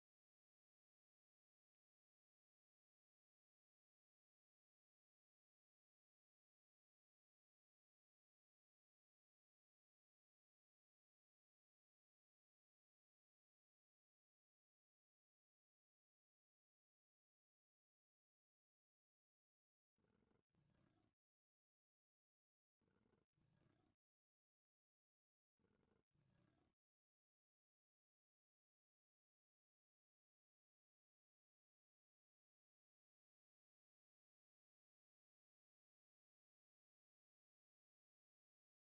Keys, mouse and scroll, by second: 1.1-1.4 drag, 1.6 shift+middle drag, 3.1 v, 3.8-4.2 right drag, 4.7 middle drag, 5.3 v, 6.3 v, 7.4-9.0 typing, 22.8 f, 24.2 drag, 24.7 f, 25.1 a, 29.3 x, 34.0 shift+click, 36.8 f.